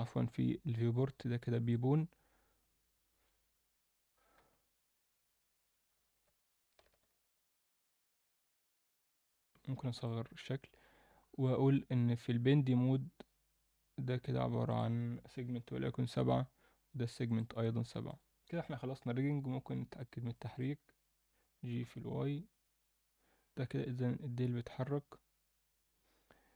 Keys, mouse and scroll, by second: 0.8-1.7 drag, 2.8 a, 4.3 alt+s, 7.0 ctrl+alt+s, 9.9 click, 11.0-13.0 scroll down 2, 13.0-13.5 scroll down 1, 13.5 click, 14.7-16.2 drag, 17.2 click, 18.1-19.1 drag, 20.0 click, 20.3 alt+middle click, 21.5 g.